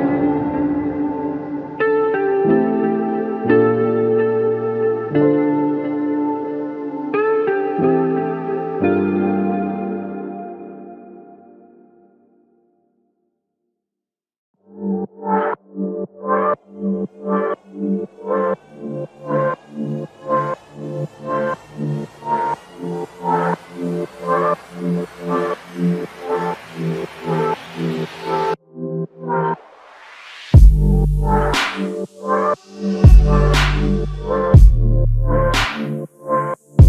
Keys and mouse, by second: 3.8 double click, 9.6 alt+click, 11.7 double click, 12.4 alt+click, 13.8 double click, 17.6 double click, 20.6 alt+click, 22.4 double click, 25.1 alt+click, 26.4 double click, 27.3 alt+click, 28.5 double click, 29.5 alt+click, 31.3 double click, 34.0 alt+click, 35.8 alt+shift+click, 36.6 alt+click.